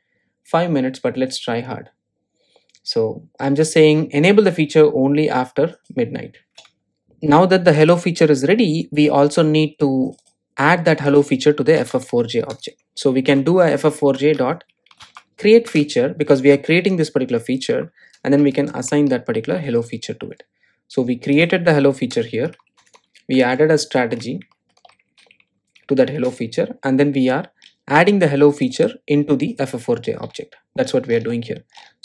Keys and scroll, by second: 13.1 Return, 25.0 shift+super+Up.